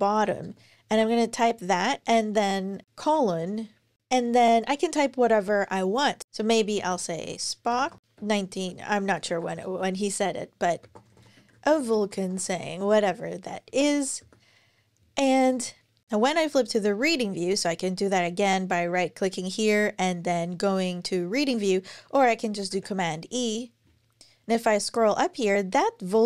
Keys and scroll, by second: 0.2 Return, 0.7 super+v, 2.8 shift+;, 4.0 space, 6.4-12.2 typing, 13.2-14.3 typing, 22.5 super+e.